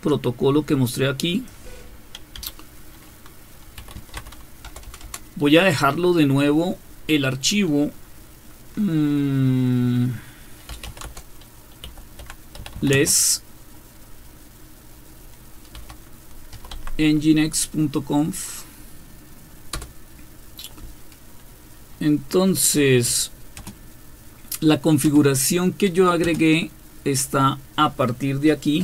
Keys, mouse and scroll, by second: 2.4 typing, 3.5-5.0 typing, 10.4-13.2 typing, 15.7-16.5 typing, 16.7 Tab, 19.7 Return, 23.5 space, 25.0 typing, 26.2 space.